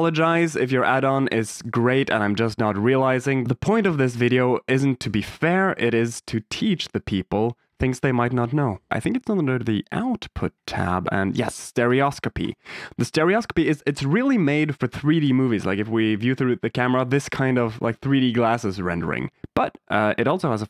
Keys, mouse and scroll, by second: 4.0-6.9 typing, 9.1 click, 9.9 click, 10.7 middle click, 11.8 click, 12.3 click, 14.4 click, 15.2 KP_0, 17.6 click, 20.3 click.